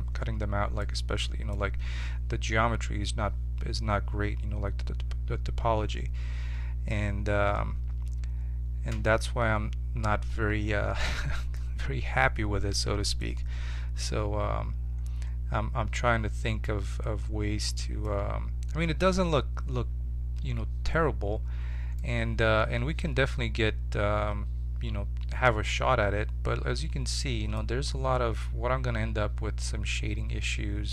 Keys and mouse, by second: 2.0-6.9 middle drag, 6.9 Tab, 11.5-14.2 middle drag, 22.4-23.9 middle drag, 27.9-30.9 middle drag.